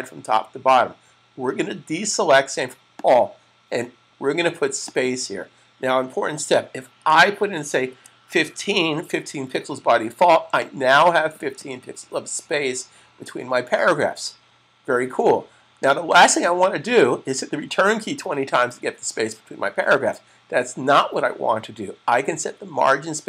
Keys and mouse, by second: 2.9 click, 7.6-8.4 typing, 10.4-11.6 click.